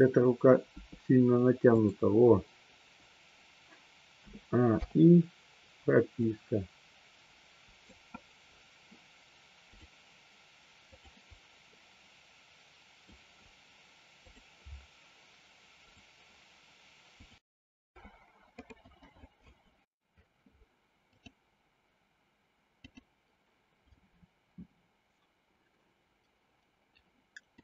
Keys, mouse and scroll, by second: 0.7 g, 1.8 click, 4.2 a, 4.7 i, 6.3-7.8 drag, 9.7 click, 10.8 click, 11.7-13.0 middle drag, 27.5-27.6 middle drag.